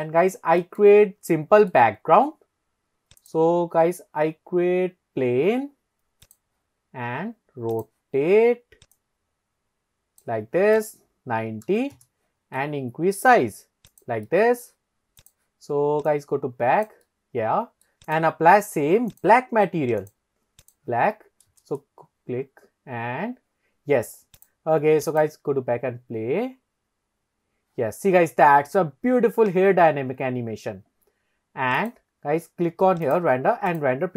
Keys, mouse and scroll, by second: 0.6 middle click, 1.0 scroll down 2, 1.3-1.7 middle drag, 3.2-3.7 drag, 6.8-7.3 scroll down 1, 7.8 click, 9.0 click, 9.1 click, 10.8-12.1 drag, 13.2 s, 14.0 click, 14.3-14.6 middle drag, 15.2 click, 16.1 click, 17.1-17.9 middle drag, 18.1 click, 19.1 click, 20.0 click, 21.5 KP_0, 24.4 click, 25.1 click, 31.9 click, 33.1-34.1 drag.